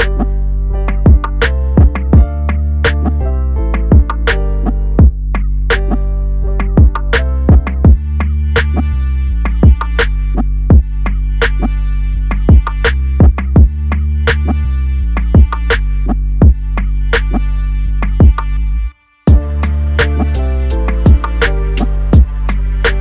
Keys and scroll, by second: 9.9 ctrl+KP_Add, 14.7 KP_Add, 22.3 ctrl+KP_Subtract, 22.8 ctrl+KP_Subtract.